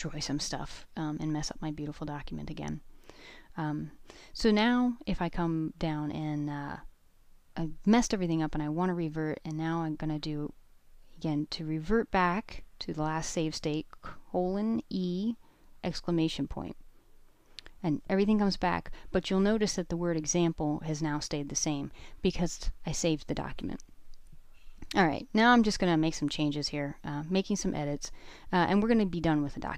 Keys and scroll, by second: 0.3 d, 11.6-12.9 typing, 16.5 Return, 22.3-23.9 typing.